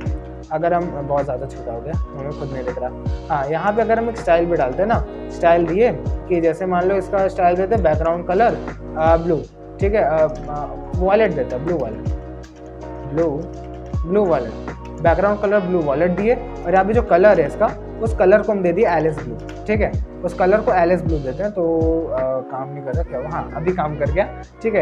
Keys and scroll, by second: 2.0 ctrl+=, 3.0 ctrl+=, 4.6-6.0 typing, 8.2-10.1 typing, 11.3 ctrl+BackSpace, 12.6 b, 13.1 l, 14.1 BackSpace, 14.9 u, 15.4 Down, 16.0 Return, 17.0 Right, 17.6-20.7 typing.